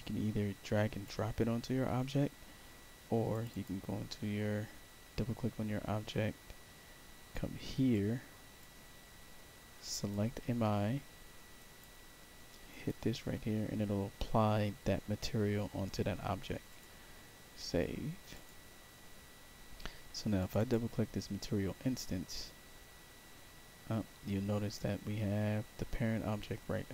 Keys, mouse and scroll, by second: 3.2 click, 3.4 click, 7.8 click, 9.9 click, 11.5 click, 12.6 click, 16.6 click, 18.2 click, 20.3 click, 20.5 click, 22.5 middle click, 22.7-24.4 middle drag.